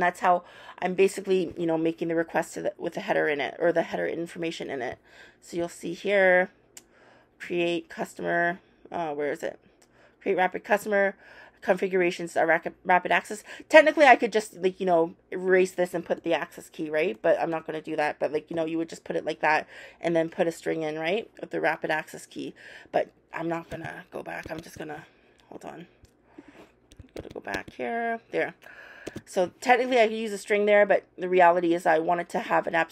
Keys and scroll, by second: 16.1 super+BackSpace, 17.5 BackSpace, 18.5 shift+', 24.4 super+z, 27.2 super+z, 29.0 super+s.